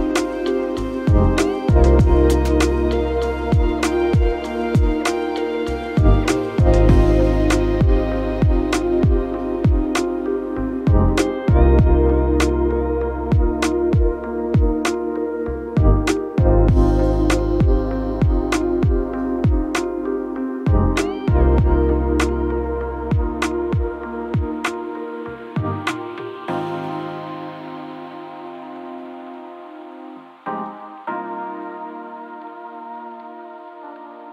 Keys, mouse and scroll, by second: 3.9 7, 4.4 5, 4.8 Return.